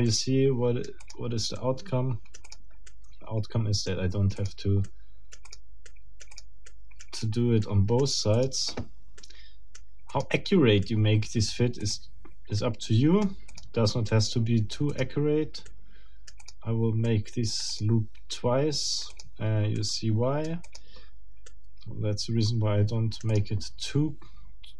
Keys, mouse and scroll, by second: 0.1-1.3 right drag, 1.0 click, 1.5-2.7 right drag, 2.5 click, 2.9-4.1 right drag, 4.4 click, 4.8 right click, 5.5 middle click, 5.9 right click, 6.3 middle click, 6.7 right click, 7.1 middle click, 7.6 right click, 8.3 click, 9.2 right click, 10.1 click, 10.8 right click, 11.8 click, 12.6 right click, 13.5 click, 14.1-15.2 right drag, 14.9 click, 15.7-16.7 right drag, 16.4 click, 17.1 right click, 17.7 click, 18.3-19.4 right drag, 19.1 click, 19.7 right click, 20.7 click, 21.5-23.6 right drag, 23.3 click, 24.1 scroll up 2.